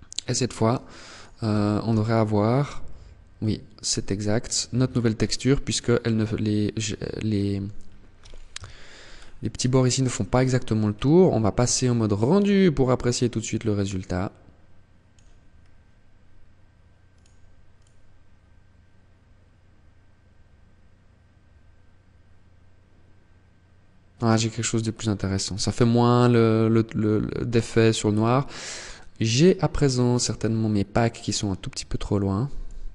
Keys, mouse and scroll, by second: 0.2 right click, 0.5 Tab, 0.9 Tab, 2.5 middle click, 5.3 middle click, 6.9 scroll up 2, 7.7 KP_0, 8.2 scroll up 1, 9.1-9.5 scroll down 2, 12.0 click, 14.6 scroll down 1, 16.1 click, 29.9 click, 32.7 right click.